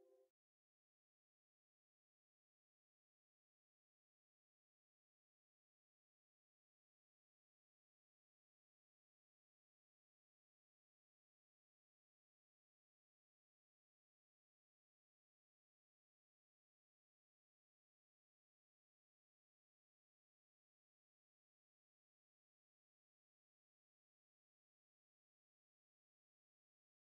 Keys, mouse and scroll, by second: 0.0 right click, 0.8 click, 1.2 click, 4.4-6.5 drag, 10.8 right click, 12.0-26.8 drag.